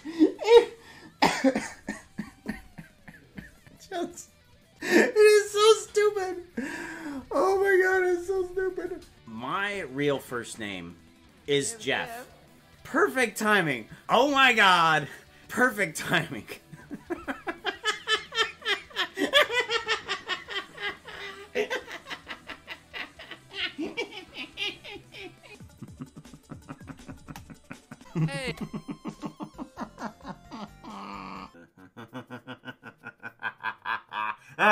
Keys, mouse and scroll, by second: 27.5 KP_0, 28.6 space.